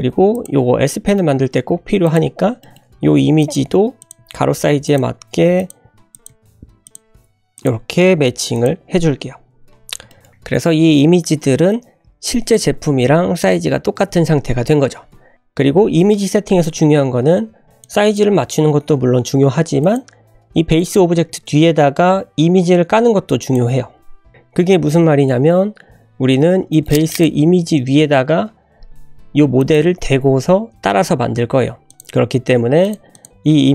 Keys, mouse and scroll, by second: 0.5 scroll up 1, 0.9 shift+middle click, 1.1 shift+scroll up 3, 1.5 g, 2.3-2.8 scroll up 3, 2.6 shift+middle click, 2.9-6.3 typing, 9.2-9.6 scroll down 2, 10.1 shift+middle click, 10.2 ctrl+z, 10.2 click, 12.3 drag, 12.7 scroll up 1, 15.3 g, 15.4 click, 15.6 g, 16.6 click, 20.1 click, 20.7 click, 21.2 g, 23.7 g, 26.1 scroll up 2, 26.7 shift+middle click, 27.1 click, 29.6 drag, 31.9 click, 32.8 click, 33.1 click, 33.5 g.